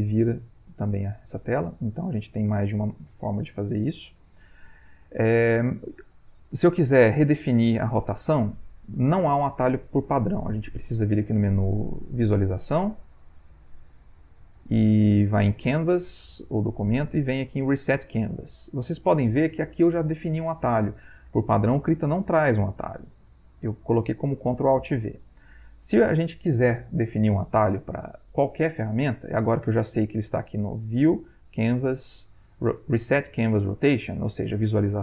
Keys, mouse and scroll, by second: 0.0 ctrl+[, 0.5 ctrl+], 1.0 ctrl+[, 1.5 ctrl+], 1.9 ctrl+[, 12.0 click, 23.2 click, 30.3 click.